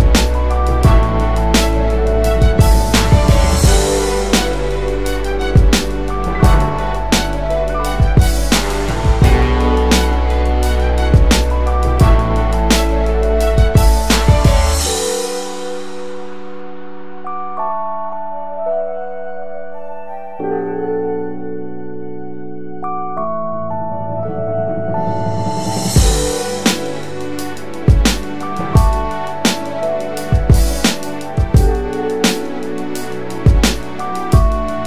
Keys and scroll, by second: 4.4-5.3 ctrl+space, 5.8 space, 5.9 space, 5.9 space, 21.8 space, 24.1-24.4 typing, 27.7-28.0 typing, 31.4 space.